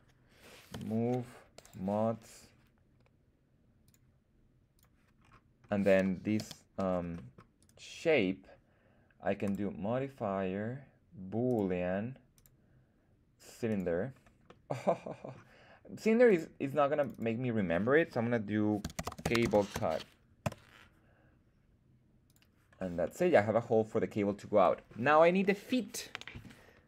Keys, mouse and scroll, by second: 0.6 m, 3.7 click, 4.6 click, 5.1-5.9 scroll down 3, 5.9 middle click, 6.3 z, 6.7 middle drag, 7.0 middle drag, 7.5 right click, 9.3-13.7 drag, 14.3-15.3 middle drag, 16.1 click, 16.9 click, 17.0-20.8 drag, 22.2 click, 22.9-23.5 middle drag, 24.5-26.4 middle drag, 26.4 middle click.